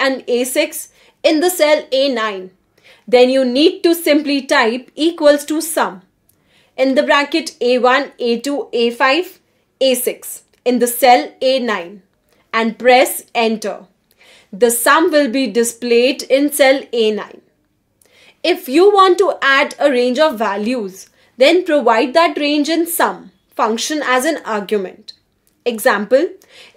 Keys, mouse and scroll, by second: 0.0-3.6 typing, 4.0 click, 5.9 Escape, 15.1 Right, 15.3 Right, 15.9 Left, 16.2-18.5 typing, 22.2 click, 24.8 Right, 25.3 Right, 25.5 Right, 26.6 Left.